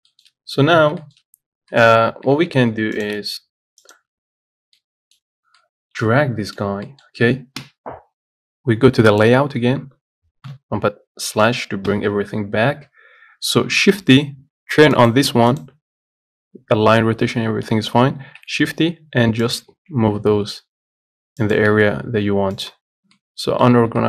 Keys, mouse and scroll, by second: 0.6-0.9 scroll down 1, 0.9-1.3 scroll up 1, 1.3 shift+middle click, 1.7-2.0 scroll up 1, 2.0 shift+middle click, 2.5 g, 5.0 middle click, 5.4-5.8 scroll up 5, 5.8-7.8 middle drag, 7.8 KP_7, 9.4 click, 10.0 scroll down 7, 10.7 KP_Divide, 12.1 KP_7, 12.6-13.2 scroll down 10, 15.2 click, 18.5 shift+d, 20.0 shift+d, 23.1 scroll down 1, 23.4 middle click, 24.0 scroll up 1.